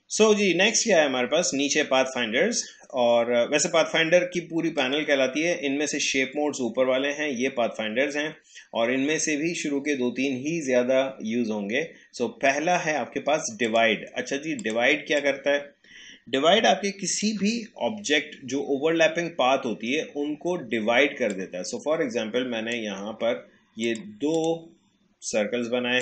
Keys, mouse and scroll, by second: 4.3-7.3 drag, 13.6-19.7 drag, 21.3-26.0 drag.